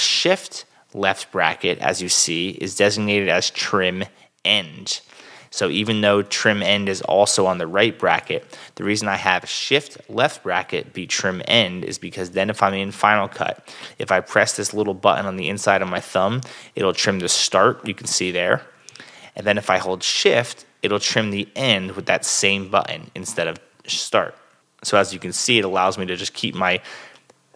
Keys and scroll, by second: 17.7 [, 19.2 super+z, 21.0 shift+[, 23.0 super+z, 23.7 shift+super+z, 24.5 super+z, 26.5 shift+[, 27.0 shift+[.